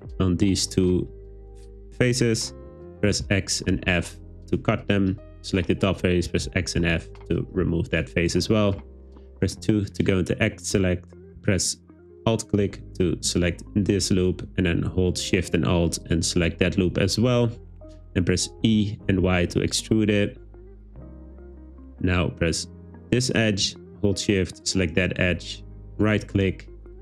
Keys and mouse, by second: 1.1 middle click, 3.1 x, 4.6 click, 6.3 x, 7.2 shift+middle click, 8.8 2, 16.1 alt+shift+click, 18.7 e, 19.1 y, 21.2 click, 25.8 super+z, 26.1-27.0 drag.